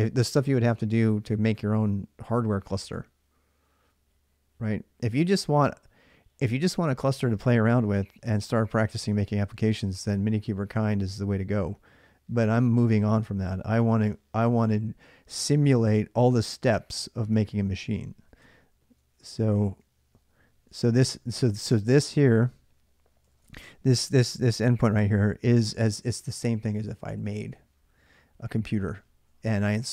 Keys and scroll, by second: 17.8-18.7 typing, 18.9 Return, 18.9 ctrl+a, 19.1 ctrl+a, 19.6 ctrl+a, 20.2-24.1 typing.